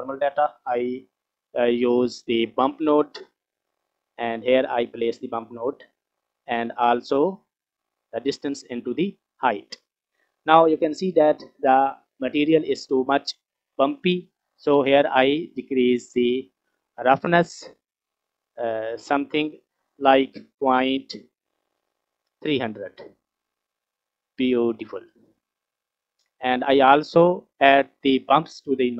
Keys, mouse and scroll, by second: 0.3 click, 1.7 shift+a, 6.3 scroll up 2, 7.2-9.1 drag, 9.9 scroll up 1, 10.8 scroll up 1, 13.9 middle click, 15.5-17.4 drag, 17.6 click, 18.1 click, 18.5 click, 19.1-23.1 drag, 22.4 KP_0, 25.6-26.3 scroll down 4, 26.3-26.7 middle drag, 26.8-27.4 scroll up 4.